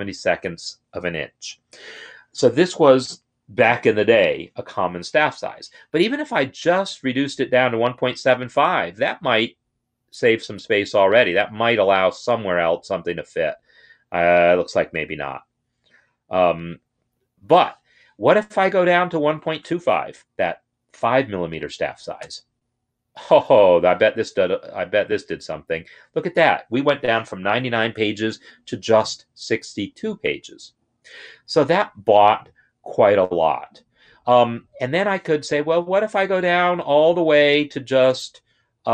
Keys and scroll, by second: 5.7 Left, 6.3 Left, 6.7 shift+Right, 7.0 shift+Right, 9.5 5, 18.8 Left, 22.0 2, 35.8 Left, 36.4 shift+Right, 36.9 shift+Right, 38.7 shift+Right.